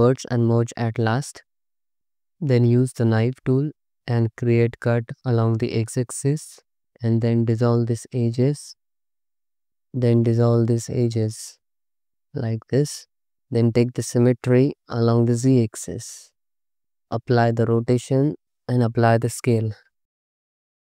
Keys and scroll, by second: 0.3 m, 1.7 2, 3.1 1, 4.4 c, 4.8 x, 5.3 space, 6.6 c, 6.9 2, 8.1 ctrl+x, 9.7 2, 11.0 ctrl+x, 11.5 ctrl+x, 13.7 a, 16.1 1, 16.7 Tab, 17.4 ctrl+a, 18.6 ctrl+a, 19.7 Tab.